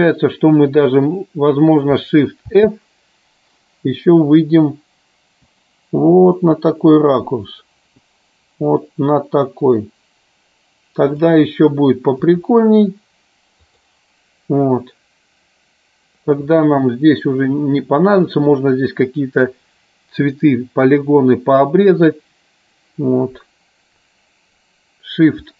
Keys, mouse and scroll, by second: 2.4 shift+f, 4.4-5.3 Up, 8.0 Down, 11.2 click, 12.3 Right, 13.6-14.1 drag.